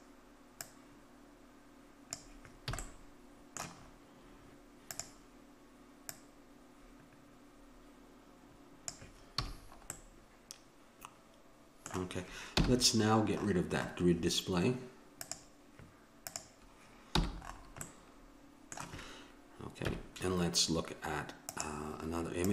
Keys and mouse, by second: 2.8 a, 4.9-7.9 drag, 9.4 a, 10.0-11.7 middle drag, 12.6 n, 15.2-18.1 drag, 17.1 n, 19.8 KP_1.